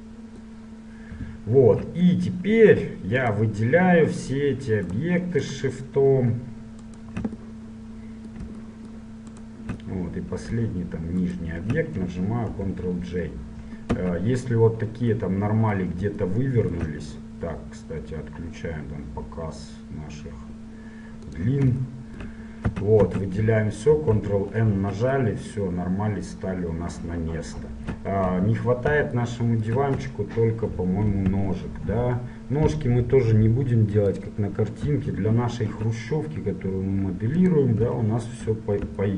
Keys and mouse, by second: 1.4-3.4 middle drag, 3.4-7.6 right drag, 7.6-9.0 middle drag, 9.5-10.6 middle drag, 10.6 right click, 11.3 click, 12.7 ctrl+j, 14.3 Tab, 21.5-23.5 drag, 22.9 a, 23.2 a, 24.2 ctrl+n, 24.8 Tab, 28.6 KP_7, 29.3-31.6 drag, 31.6 shift+a, 35.9 s, 38.0 KP_1, 38.9-39.1 drag.